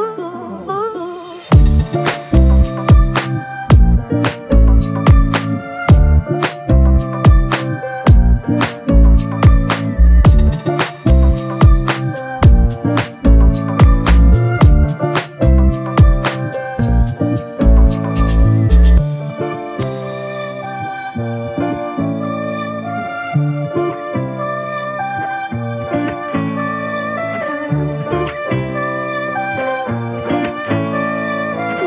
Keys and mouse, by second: 0.8 double click, 2.2 double click, 8.0 double click, 16.3 space, 21.0 alt+click, 30.0-31.6 typing.